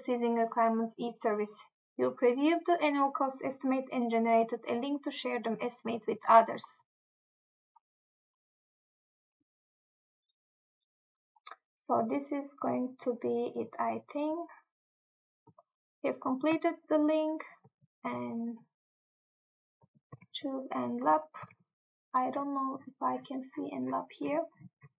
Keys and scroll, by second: 20.2 Tab, 21.5 Tab.